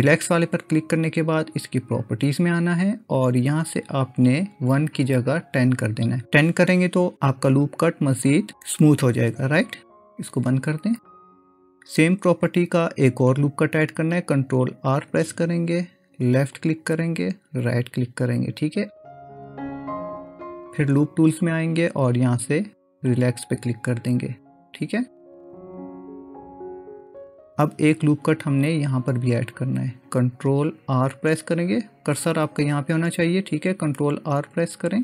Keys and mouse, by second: 0.0-0.4 right drag, 2.6 click, 4.4-7.2 drag, 10.3 click, 15.0 ctrl+r, 19.0-23.2 right drag, 34.3 ctrl+r.